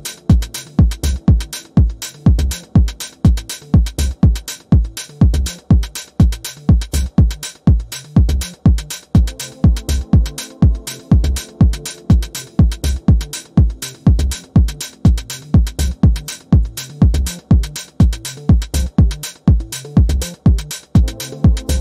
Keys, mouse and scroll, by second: 0.5 ctrl+scroll up 1, 1.0-3.4 drag, 4.3-5.5 typing, 6.2 click, 6.8-8.0 typing, 8.9 click, 10.3 ctrl+d, 10.6-13.8 drag, 14.1-15.4 ctrl+scroll up 2, 15.4-17.0 alt+shift+drag, 17.3 ctrl+scroll up 1, 20.6-21.8 drag.